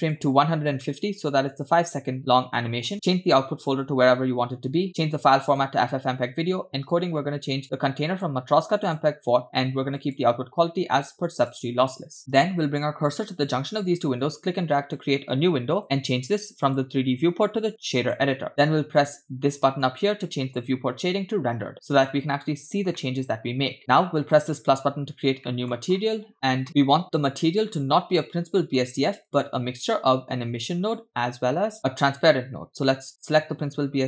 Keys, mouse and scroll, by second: 0.0-1.7 drag, 2.5-2.9 scroll down 2, 2.9 click, 3.8 /, 4.9-5.6 drag, 6.9 click, 8.0 scroll down 2, 8.1-9.0 drag, 10.1-11.5 drag, 12.8-14.2 scroll up 5, 14.2-15.8 drag, 16.7-18.2 drag, 20.9 click, 21.7-22.5 middle drag, 23.0-23.5 shift+middle drag, 24.4-24.8 drag, 25.4 middle click, 25.9-26.6 scroll up 5, 28.2-28.6 scroll up 2, 28.6 middle click, 28.8 scroll up 2, 29.3 click.